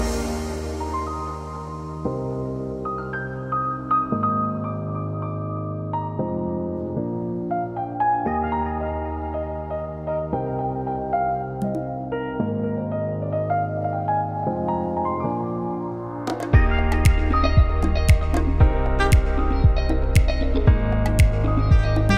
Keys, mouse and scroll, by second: 2.7 KP_1, 3.8 alt+z, 4.1 shift+middle click, 4.4 Tab, 5.3 3, 7.5 alt+click, 9.5 ctrl+KP_Add, 9.7 ctrl+KP_Add, 10.8 ctrl+KP_Add, 12.1 scroll up 3, 13.7 alt+shift+click, 17.3 scroll up 1, 17.4 middle click, 18.9 middle click, 19.5 c, 22.0 middle click.